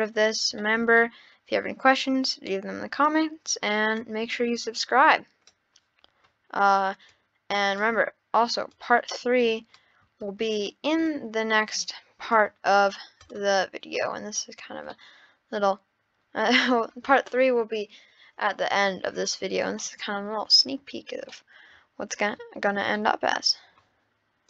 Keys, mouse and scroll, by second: 0.2-0.6 scroll up 2, 0.7-2.5 middle drag, 2.5 scroll down 1, 4.0 click, 7.1 click, 8.7 click, 10.4 shift+d, 11.1 click, 13.1 scroll down 4, 13.2 drag, 13.9-14.9 scroll up 10, 13.9 middle click, 14.9-18.0 middle drag, 19.8-21.0 middle drag, 21.0-21.3 scroll down 3, 21.3-22.4 middle drag, 22.4-23.0 scroll up 3, 23.0 middle click, 23.5 scroll down 6.